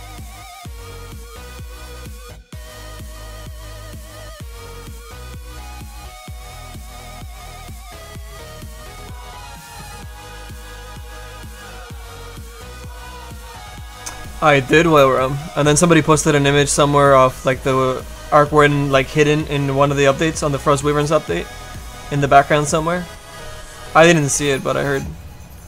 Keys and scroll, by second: 18.2 s, 18.8 s.